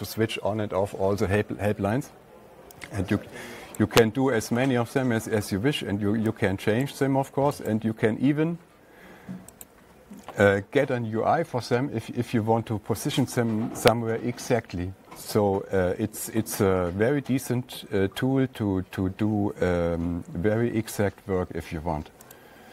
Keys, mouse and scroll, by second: 4.2-7.2 drag, 8.1 right click, 10.1 click.